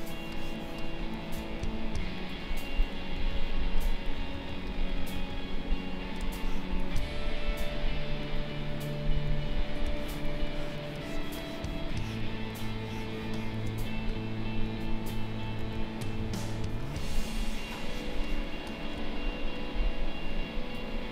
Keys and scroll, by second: 2.9 Delete, 6.1 space, 8.9 Delete, 15.4 Delete, 16.6 space.